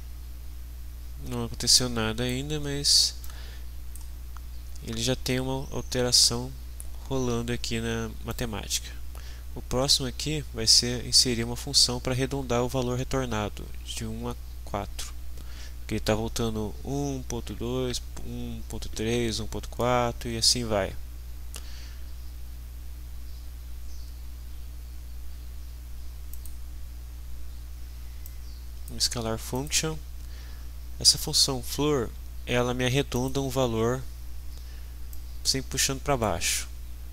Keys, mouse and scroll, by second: 1.8 click, 3.3-4.1 drag, 8.3 right click, 26.3 click, 28.3-29.1 drag, 29.5 click, 33.1 click, 35.1-36.5 drag.